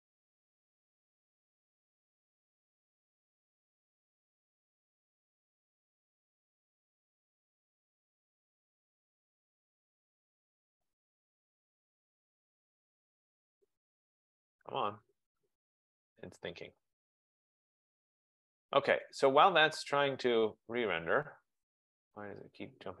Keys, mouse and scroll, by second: 1.3 click, 4.6 click, 6.5 click, 14.7 click, 19.6 click.